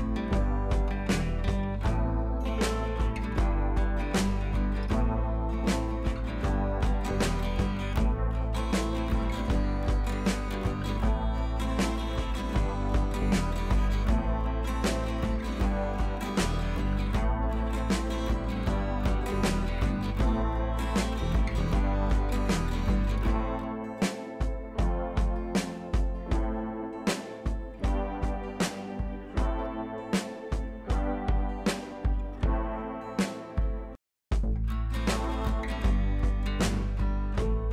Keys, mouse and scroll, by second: 0.7 click, 2.1 ctrl+z, 3.1 click, 3.6-4.3 scroll up 1, 4.3 click, 4.6-6.0 typing, 6.8 click, 8.6-9.1 click, 9.3 ctrl+c, 9.8 click, 12.5-14.9 drag, 21.9 ctrl+t, 22.5-23.0 alt+drag, 28.4 alt+Num_Lock, 28.8-31.1 alt+drag, 33.8 ctrl+c, 34.1 click, 34.9 ctrl+v, 35.8-37.7 drag.